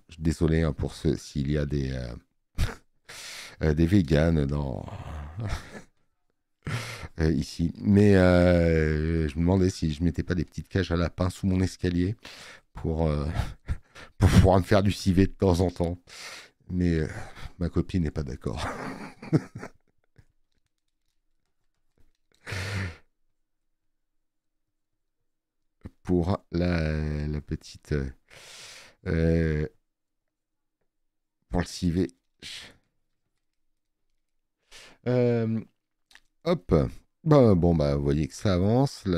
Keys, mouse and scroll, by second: 14.4 space, 14.5 click, 34.5 middle click.